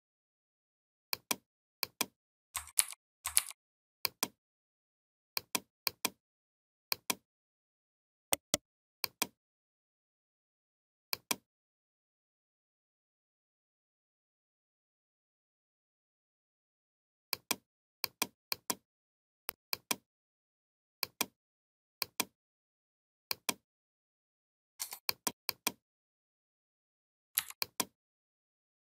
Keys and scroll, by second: 2.6 ctrl+g, 3.2 ctrl+g, 27.2 v.